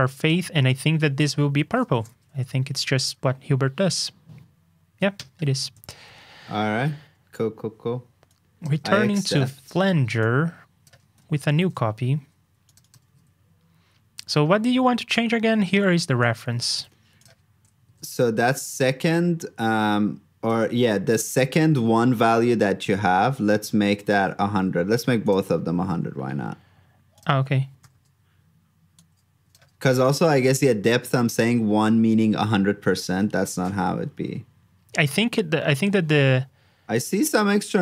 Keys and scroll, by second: 1.5 super+c, 1.9 super+j, 5.7 super+j, 8.9 super+c, 11.4 alt+shift+Down, 13.0 super+v, 16.7 super+c, 17.9 super+v, 24.5 super+z, 29.8 super+c, 30.0 super+j.